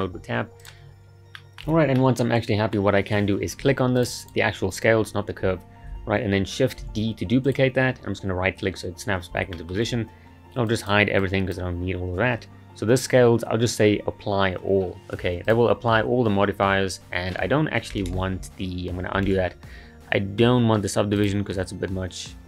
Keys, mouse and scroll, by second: 0.6 click, 0.7 scroll, 0.9-1.4 scroll up 2, 1.4-2.9 shift+middle drag, 2.9-4.0 scroll up 1, 4.0 click, 4.2 click, 6.9 shift+d, 9.5-10.7 shift+middle drag, 10.7-14.2 drag, 15.5-18.5 drag, 19.3 ctrl+z, 19.7-21.2 scroll down 8, 21.2-22.4 drag.